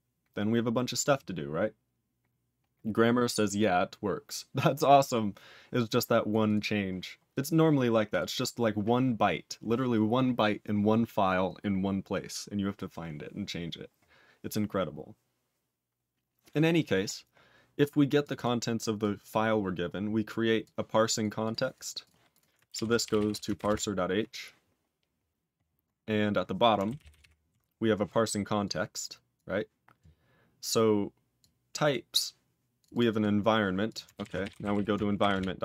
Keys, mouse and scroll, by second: 5.8 click, 6.2 click, 6.4 click, 7.3 click, 8.0 click, 17.1 scroll up 4, 18.2 click, 18.3 double click, 19.0 click, 19.2 click, 19.5-20.1 scroll down 7, 20.6 click, 21.1 click, 21.4 click, 21.7 click, 22.0 click, 22.3 click, 23.8 ctrl+Return, 24.8-26.0 scroll down 16, 26.0 scroll up 14, 26.9 ctrl+=, 28.6 click, 29.3 click, 31.3 click, 31.8 click, 32.8 click, 32.9 double click, 33.3 scroll up 4, 33.8 click, 35.3 ctrl+Return.